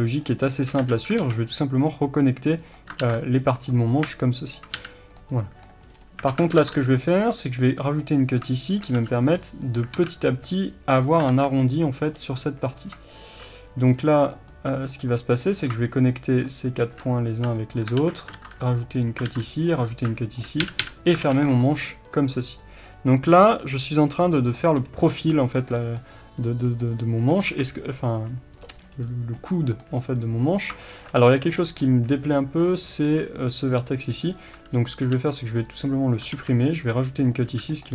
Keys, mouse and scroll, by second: 0.8 f, 1.2 alt+a, 1.3-3.6 middle drag, 3.0 ctrl+r, 3.6 click, 4.7 f, 5.2-7.6 middle drag, 5.9 scroll up 1, 6.3 alt+a, 6.6 ctrl+r, 7.6 click, 7.8 middle click, 8.3 click, 9.0 f, 9.4-12.1 middle drag, 10.0 alt+a, 11.3 ctrl+r, 12.1 click, 13.2-15.6 drag, 17.4 f, 18.0 alt+a, 18.4 ctrl+r, 18.8 click, 19.2 ctrl+r, 19.6 click, 20.6 f, 21.1 scroll down 1, 21.6-33.5 middle drag, 24.6 scroll down 1, 27.5 KP_3, 28.6 scroll up 1, 33.5 click, 35.6 x, 36.3 ctrl+r, 36.8 click, 37.5 f.